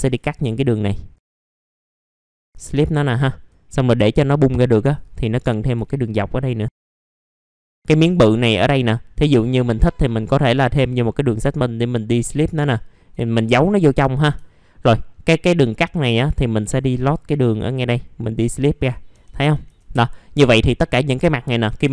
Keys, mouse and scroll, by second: 0.5 alt+middle click, 1.6 ctrl+click, 1.8 middle click, 1.8 scroll down 1, 2.2 right click, 2.5 click, 3.0 alt+middle click, 3.8-4.8 scroll up 1, 4.8 click, 5.3 middle click, 6.4 ctrl+click, 6.7 right click, 7.1 click, 7.2 scroll down 1, 7.6 middle click, 8.3-9.1 scroll up 1, 9.1 click, 11.3 right click, 12.3 click, 12.8 alt+middle click, 13.8 scroll up 1, 14.4 alt+middle click, 15.1 scroll up 1, 15.9 click, 17.0 right click, 18.2 click, 19.9 middle click, 20.0-20.3 scroll down 1, 20.4 alt+middle click.